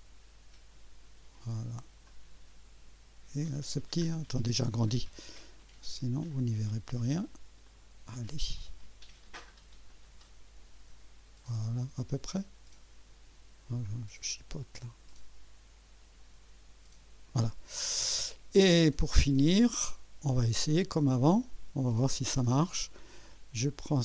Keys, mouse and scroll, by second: 2.1 click, 3.6 click, 4.0 scroll up 1, 4.7 right click, 6.3 click, 7.7 right click, 9.9-11.3 drag, 11.5-11.8 scroll down 1, 13.9 scroll up 1, 15.1-17.4 drag, 17.5-18.2 scroll down 2, 18.6-19.4 right drag, 20.4 click, 21.1 right click, 21.8 click.